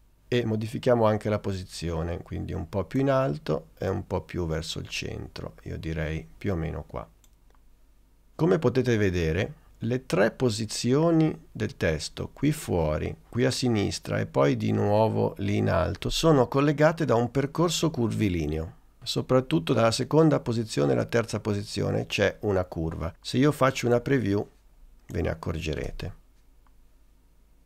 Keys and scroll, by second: 25.9 space.